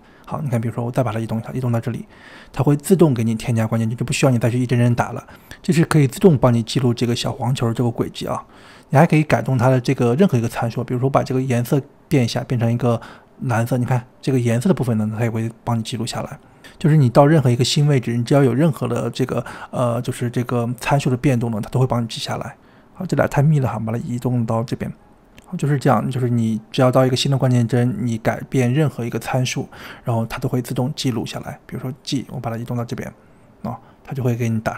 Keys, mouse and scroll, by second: 0.9 g, 2.6-4.0 drag, 4.2 g, 5.9-6.5 scroll down 2, 6.5-7.1 scroll down 1, 7.1-10.0 shift+middle drag, 10.7 click, 14.4 click, 14.8 g, 16.6 click, 17.7 click, 18.4 g, 21.3-23.0 drag, 23.0 g, 25.8 click, 27.0 g, 28.3-30.4 drag, 32.3 g.